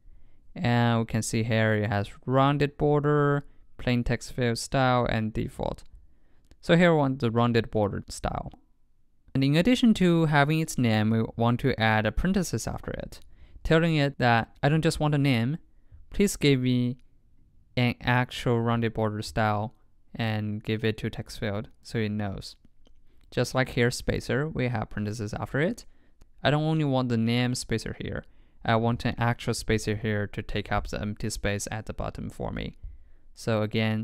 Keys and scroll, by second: 12.9 super+Right, 13.5 super+s.